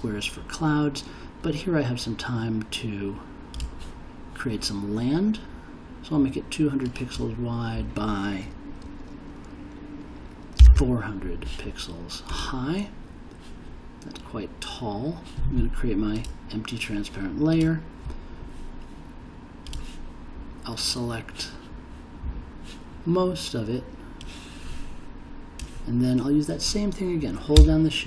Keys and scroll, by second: 10.3-11.2 typing.